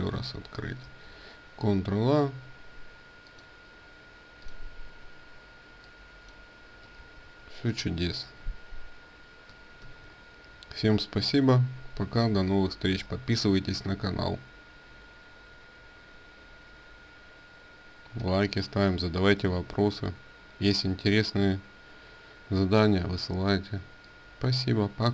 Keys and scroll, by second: 0.5 ctrl+a, 6.7 ctrl+z, 9.4 ctrl+w.